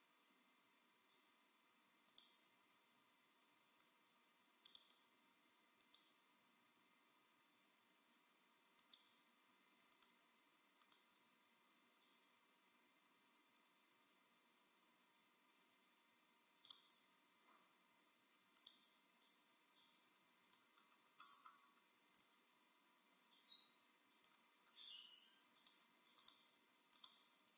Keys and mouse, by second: 2.2-3.9 drag, 4.7-6.4 drag, 5.8-7.4 right drag, 7.8 z, 8.9-12.4 right drag, 12.4 z, 14.7 x, 17.6 x, 18.6-20.1 drag, 19.2 z, 21.5 middle click, 22.2 middle click, 24.4-25.5 middle drag, 25.5-27.5 right drag.